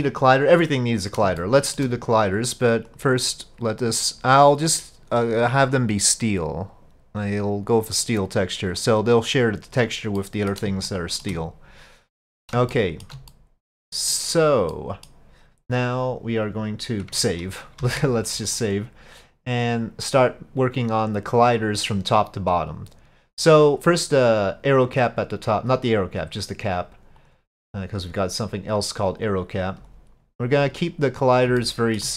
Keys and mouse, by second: 1.4-1.8 shift+middle drag, 2.9 click, 3.9-8.4 drag, 10.2-10.5 middle drag, 10.9-11.2 shift+middle drag, 12.7-13.1 shift+middle drag, 13.3-14.3 middle drag, 14.7-15.1 middle drag, 17.8 ctrl+s, 18.7-27.3 drag, 28.9-29.9 drag, 31.7-32.0 shift+drag.